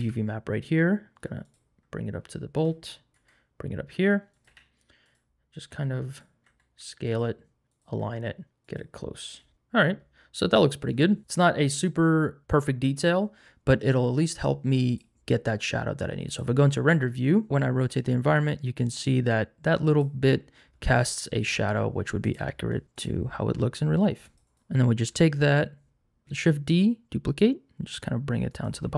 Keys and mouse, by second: 0.0 g, 3.1 s, 4.3 click, 4.4 g, 5.7 s, 6.1 click, 6.4 s, 7.0 click, 7.1 g, 7.7 click, 7.9 s, 8.6 click, 9.5 Tab, 9.5 g, 11.2 click, 11.2 g, 14.9 click, 17.5-20.0 drag, 22.9 click, 24.2 click, 24.4 n, 24.5 click, 26.2 shift+d, 26.2 z, 28.5 click.